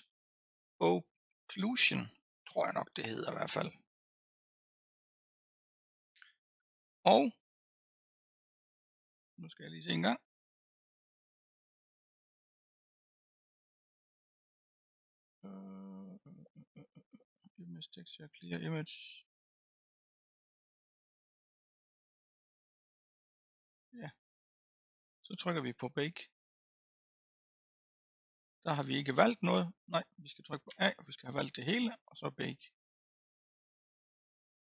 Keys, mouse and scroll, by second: 26.2-30.7 drag, 30.7 a, 32.4-34.7 drag.